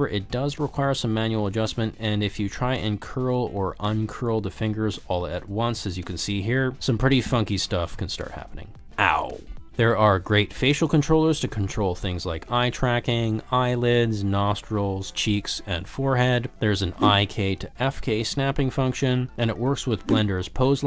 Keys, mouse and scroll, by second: 0.0 r, 0.3 g, 1.0 drag, 1.2-1.8 middle drag, 2.2 s, 4.6 s, 6.6 ctrl+z, 7.0 s, 8.9 shift+middle click, 9.0 middle click, 9.4 middle click, 10.1 alt+z, 10.3 g, 11.9 click, 12.5 ctrl+z, 12.9 drag, 13.2 g, 14.3 click, 15.5 click, 15.8 g, 16.6 click, 16.6 r, 19.8 click.